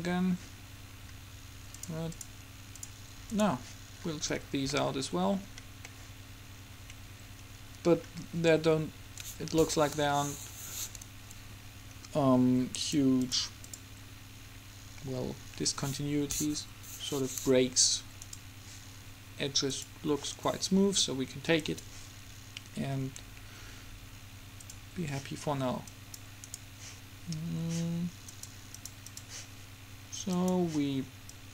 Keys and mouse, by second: 1.0 middle click, 2.0-5.3 drag, 6.8-9.5 middle drag, 10.1 Home, 12.0-13.0 middle drag, 13.0-15.5 drag, 15.5-18.5 middle drag, 18.5-20.3 right drag, 19.9-21.7 drag, 21.7 middle click, 21.8-23.5 drag, 24.8-26.5 drag, 26.5-28.0 middle drag, 28.0 right click, 28.5-31.5 drag.